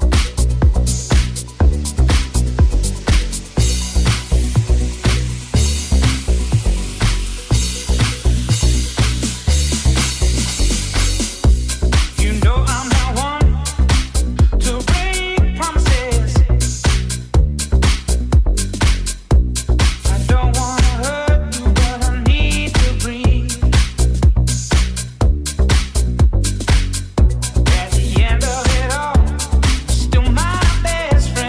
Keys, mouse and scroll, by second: 0.3-3.0 middle drag, 2.1 c, 4.7 shift+click, 4.9 shift+click, 5.0-6.5 shift+middle drag, 5.6 c, 6.1 c, 7.9 middle click, 9.1 middle click, 10.8-13.6 middle drag, 14.6-16.8 middle drag, 14.8 c, 16.9 c, 17.4-21.2 middle drag, 21.5 middle click, 22.3 c, 22.5-24.7 middle drag, 25.4 c, 25.5-31.4 middle drag, 25.5 c, 26.4 c, 30.6-31.4 drag, 30.6-31.4 right drag.